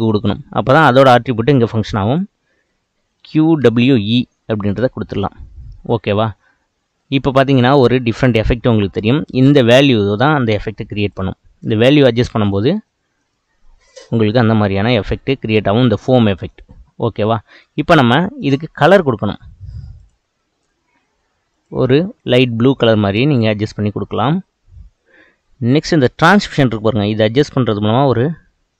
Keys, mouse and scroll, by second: 7.0-10.6 middle drag, 10.6-17.6 drag, 17.6-18.6 middle drag, 18.6 click, 21.5 click, 26.6-28.7 drag.